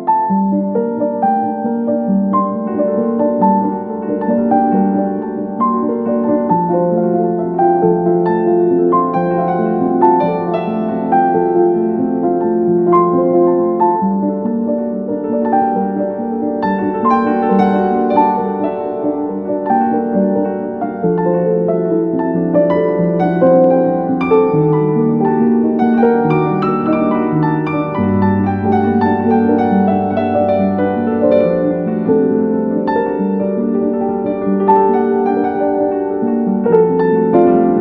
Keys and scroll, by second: 1.5 Escape, 5.6 space, 7.0 t, 7.4 Escape, 11.6 space, 12.3 c, 12.7 Escape, 19.4 space, 21.5 c, 21.8 Escape, 24.8 Escape, 25.1 F2, 32.6 F2, 36.0 F3.